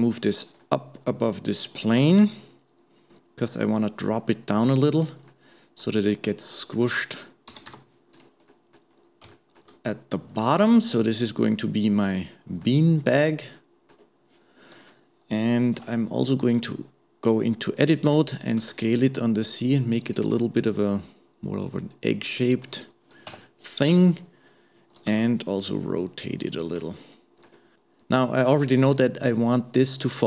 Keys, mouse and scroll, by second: 0.6-2.0 middle drag, 2.0 g, 5.3-7.5 middle drag, 7.5 g, 8.5 middle click, 8.9-9.3 scroll down 1, 9.3 shift+middle click, 10.0-10.4 scroll up 1, 10.4-15.8 middle drag, 15.8 Tab, 20.4-23.3 middle drag, 23.3 Tab, 23.9 KP_1, 25.1 r, 26.8 middle click.